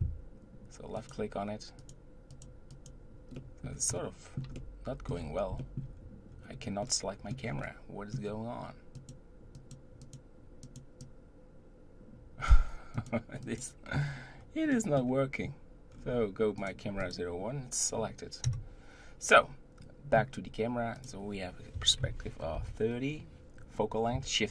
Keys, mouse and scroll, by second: 1.8 click, 3.4-5.9 middle drag, 5.9-6.5 scroll up 1, 6.5-6.8 scroll down 1, 6.8-8.9 middle drag, 8.9 click, 10.6 click, 12.9-13.9 drag, 14.0 scroll up 1, 14.4-14.7 scroll down 1, 14.7-15.9 middle drag, 15.9-16.6 scroll down 4, 16.6 click, 17.0 click, 18.4 KP_0, 19.4-20.9 scroll up 2, 20.9-24.0 drag.